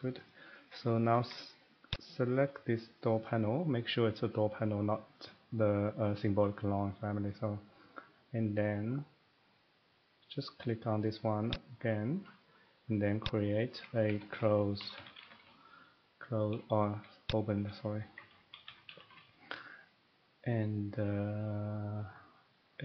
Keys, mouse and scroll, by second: 0.2 click, 0.3 middle click, 0.5 middle click, 0.7 middle click, 0.8 scroll, 1.1 Escape, 1.2 Escape, 1.9 click, 4.0 middle click, 6.7 middle click, 11.5 click, 13.2 click, 14.1-15.4 typing, 17.3 click, 17.5-19.1 typing.